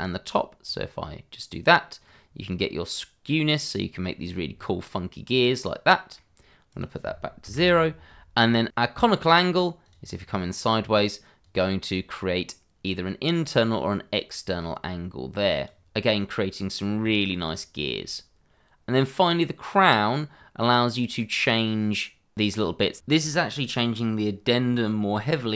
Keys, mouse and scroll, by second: 0.6 click, 4.5-4.9 scroll down 1, 4.9 middle click, 6.7 click, 7.4 0, 7.5 Return, 9.8 click, 10.3 scroll up 1, 11.4 click, 15.9 middle click, 17.2 shift+middle click, 19.4 click.